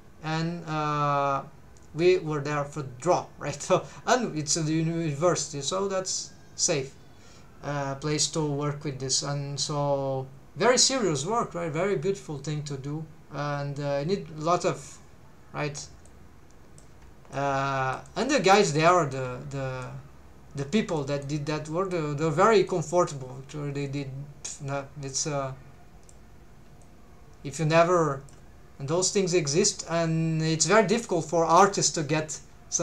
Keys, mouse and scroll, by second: 16.1 click, 17.3 middle click, 18.1 middle click, 18.7 scroll up 1, 18.9 middle click, 19.2 scroll down 1, 19.3-19.8 scroll up 1, 19.8 middle click, 21.0 middle click, 21.9 middle click, 25.3 click, 26.8-28.4 drag, 29.1-29.7 scroll up 2, 29.7 scroll down 2, 31.1-32.8 drag.